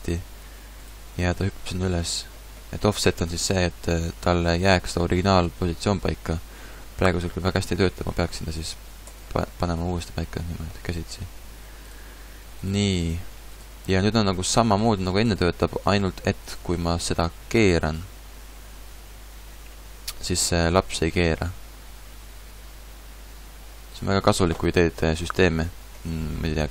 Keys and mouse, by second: 2.3 click, 3.5-6.5 drag, 8.1 g, 9.1 middle click, 12.0 g, 13.1 g, 14.1 g, 15.3 g, 17.7 r, 20.6-22.5 drag, 21.1 r, 24.0 click, 24.8-26.7 middle drag.